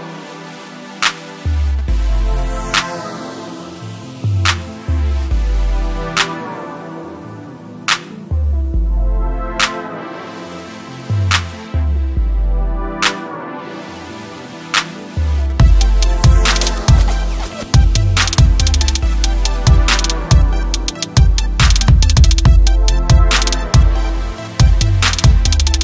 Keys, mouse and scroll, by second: 2.5 space, 3.9 space, 4.0 ctrl+m, 6.0 click, 6.4 ctrl+m, 6.6-7.3 scroll down 1, 7.4 click, 8.4 click, 9.0 ctrl+m, 9.3-9.9 scroll down 1, 9.9 click, 10.1-10.7 scroll up 1, 10.9 ctrl+m, 11.2-11.6 scroll down 1, 11.6 click, 11.9 ctrl+m, 12.2 scroll down 1, 12.8-14.1 scroll up 1, 14.3-14.8 scroll down 1, 15.4 scroll up 1.